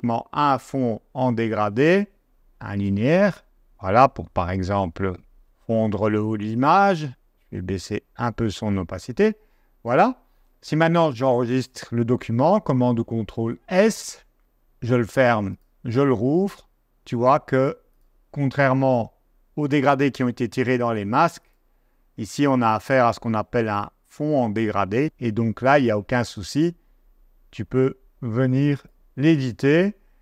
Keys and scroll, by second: 12.4 super+s, 14.4 super+w, 30.1 super+z.